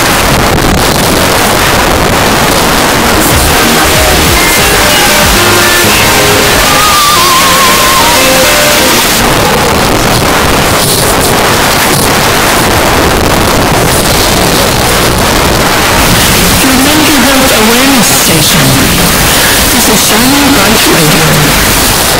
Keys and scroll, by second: 9.0 Page_Down.